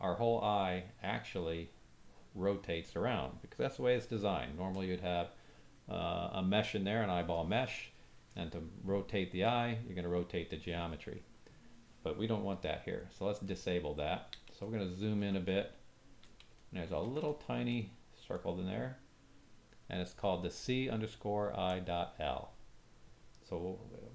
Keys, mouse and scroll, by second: 13.5 ctrl+middle click, 14.6-14.9 shift+drag, 14.6 shift+middle click, 15.4 ctrl+click, 15.5-15.9 ctrl+drag, 15.5 ctrl+middle click, 16.2 click, 16.5 shift+middle click, 17.3 ctrl+middle click, 18.3 click.